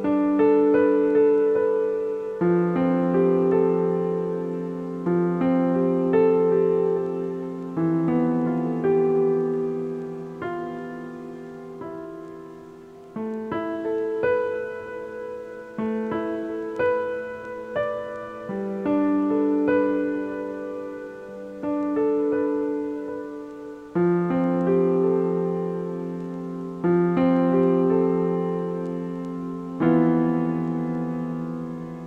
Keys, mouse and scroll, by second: 1.0 shift+click, 1.4 shift+click, 2.0 shift+click, 2.4 shift+click, 4.1 ctrl+j, 4.7 click, 5.6 shift+click, 6.4 shift+click, 7.0 shift+click, 7.8 shift+click, 8.5 shift+click, 10.0 ctrl+j, 10.7 a, 10.9 a, 11.2 click, 11.7 click, 13.1 click, 18.0 click, 18.8-20.0 drag, 25.9 click, 27.4 click, 30.2-30.7 drag, 30.7-31.8 scroll down 13, 31.8-32.0 typing.